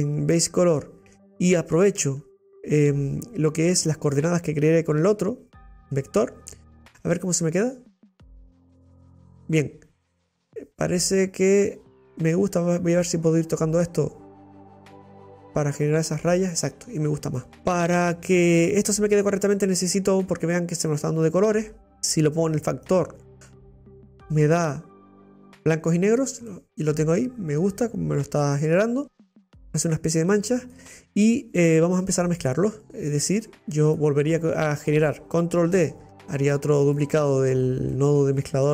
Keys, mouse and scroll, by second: 0.6 click, 0.7-3.9 middle drag, 3.9 click, 8.7 scroll up 3, 9.1-13.1 middle drag, 13.1-15.9 drag, 16.8-17.3 scroll down 5, 17.4-19.6 middle drag, 19.6 click, 19.7-22.6 drag, 26.5-30.3 middle drag, 30.3 click, 33.8 click, 36.1 shift+d, 38.3 middle click.